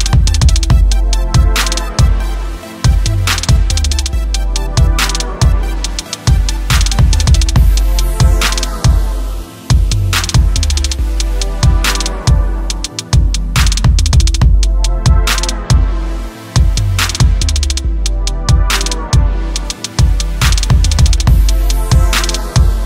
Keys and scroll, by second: 0.1 ctrl+space, 0.5 ctrl+space, 0.7 ctrl+space, 20.0 ctrl+z, 20.8 ctrl+z, 21.7 ctrl+z.